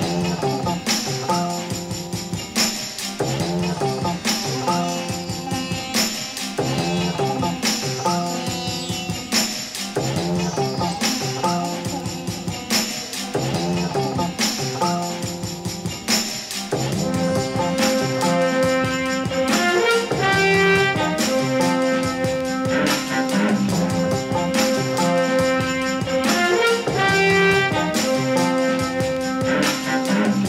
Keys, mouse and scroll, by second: 0.9-2.0 drag, 2.4 click, 2.9 click, 3.5-3.9 drag, 4.3-5.6 drag, 6.6 click, 10.1 click, 10.5 click, 11.7 middle click, 12.2-12.8 middle drag, 13.2 drag, 13.7 middle click, 15.1-15.9 ctrl+KP_Add, 16.7-17.6 middle drag, 17.9 KP_3, 19.9 click, 20.1 click, 21.2 r, 24.0 click, 24.2 middle click, 24.4 click, 25.5 click, 25.9 shift+click, 26.3 g, 26.4 z, 27.0 click, 27.1 click, 27.6 g, 27.7 y, 28.8 click, 29.0 click, 29.2 click, 29.4 click, 29.9 click.